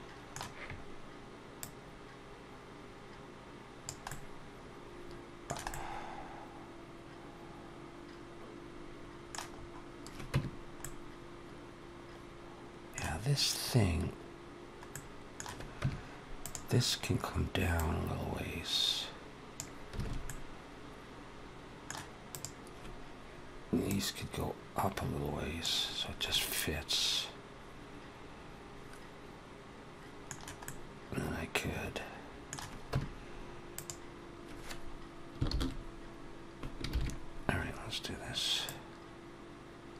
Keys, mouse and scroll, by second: 1.4 click, 3.9 middle click, 5.6 middle click, 9.3-9.7 scroll up 3, 10.1 Tab, 10.6 middle click, 12.4 middle click, 14.8 middle click, 15.6 Tab, 16.2 click, 17.8 click, 19.9 alt+a, 20.1 middle click, 22.1 click, 23.9 click, 26.2 middle click, 30.5 middle click, 32.7 Tab, 33.7 click, 35.3 ctrl+l, 36.7 ctrl+KP_7, 38.5 click.